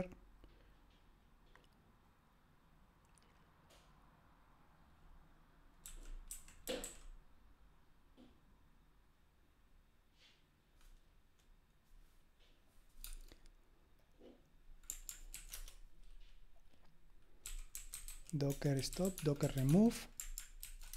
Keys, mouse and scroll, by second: 5.6-7.3 typing, 15.4 ctrl+alt+v, 15.5 Return, 17.2-20.9 typing, 20.6 ctrl+alt+v.